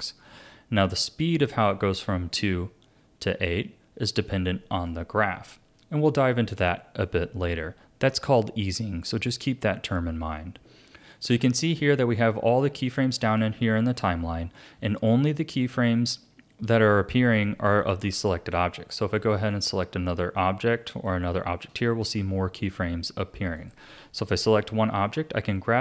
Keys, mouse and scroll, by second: 0.5-3.6 drag, 11.6-14.8 drag, 19.5 shift+click, 20.9 shift+click, 23.6 click.